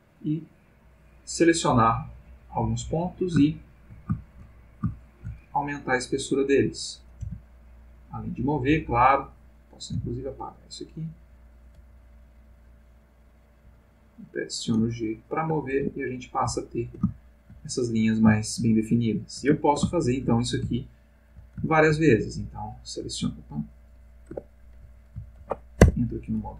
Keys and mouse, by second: 1.1 click, 1.6-3.3 drag, 3.5 shift+middle click, 5.0 shift+click, 5.6 shift+click, 7.0 click, 7.2 g, 8.1 click, 8.7 x, 9.3 click, 9.8 click, 9.9 g, 11.1 click, 11.6 click, 11.7 g, 12.7 click, 13.2 click, 13.6 g, 14.3 click, 14.9-15.7 ctrl+middle drag, 15.9 ctrl+Tab, 16.6-17.7 ctrl+middle drag, 18.3 shift+middle click, 19.1 shift+middle click, 19.7 ctrl+shift+middle click, 20.9 shift+middle click, 21.6 ctrl+shift+middle click, 22.6 click, 25.3 ctrl+z, 25.8 ctrl+Tab.